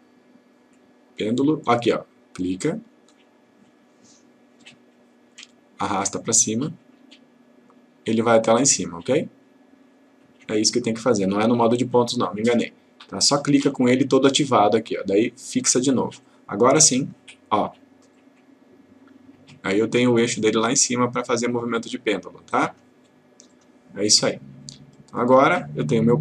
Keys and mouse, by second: 2.5 click, 6.2-9.9 click, 15.6 click, 25.3 click.